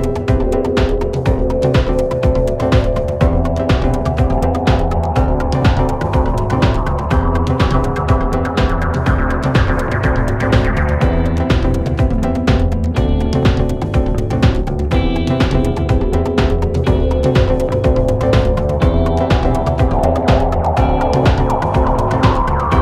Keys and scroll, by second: 7.8 ], 12.0 ], 13.3 ctrl+z, 13.7 ], 20.6 4.